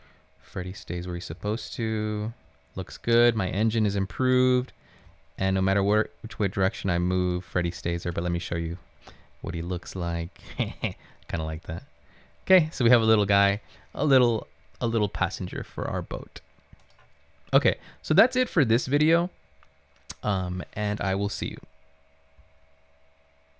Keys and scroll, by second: 1.5 Right, 2.0 Right, 2.1 Right, 2.2 Right, 2.5 Right, 3.5 Up, 3.9 Up, 4.0 Up, 5.0 Up, 5.0 Up, 5.2 Up, 5.2 Right, 5.8 Right, 6.0 Left, 6.6 Left, 7.0 Left, 7.6 Left.